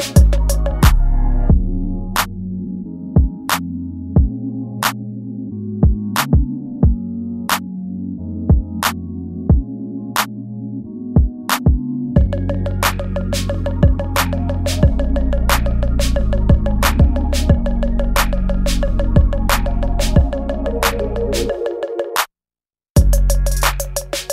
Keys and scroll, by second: 0.7 ctrl+z, 1.1 ctrl+z, 1.6 space, 2.1 ctrl+z, 2.2 space, 2.9 ctrl+z, 3.7 space, 5.0 ctrl+z, 5.3 ctrl+z, 5.9 space, 7.0 space, 7.3 space, 7.7 ctrl+z, 8.2 space, 9.3 space, 10.2 space, 11.0 ctrl+s, 11.2 space, 11.9 space, 12.3 ctrl+z, 13.5 ctrl+z, 13.6-18.3 typing, 14.5 ctrl+z, 17.3 ctrl+z, 19.0 ctrl+z, 20.3 space, 21.3 ctrl+s, 22.4 space, 23.5 space.